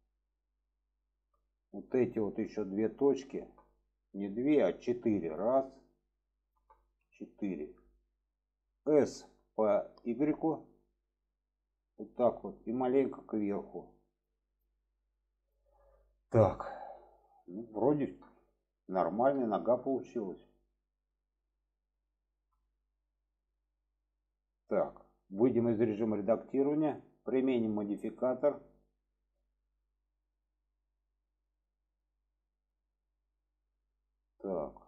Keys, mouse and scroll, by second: 1.0 shift+middle drag, 2.4 drag, 2.6 middle drag, 3.7 middle drag, 4.2 alt+z, 4.8-5.3 drag, 6.0 click, 7.3-8.0 middle drag, 8.9 s, 12.0-12.5 middle drag, 13.2 click, 14.4 click, 16.1-16.9 middle drag, 17.9 shift+middle click, 19.4 shift+middle drag, 20.7-21.4 middle drag, 22.0-22.3 shift+middle drag, 23.5-25.1 middle drag, 27.7-28.5 drag, 29.3-33.6 middle drag, 34.6 shift+middle click.